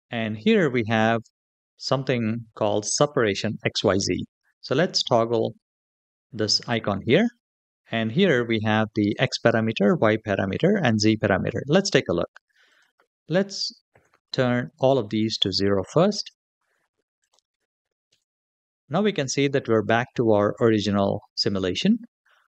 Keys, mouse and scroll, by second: 6.8 click, 12.5-14.2 drag, 15.1-16.3 drag, 17.0-18.2 drag.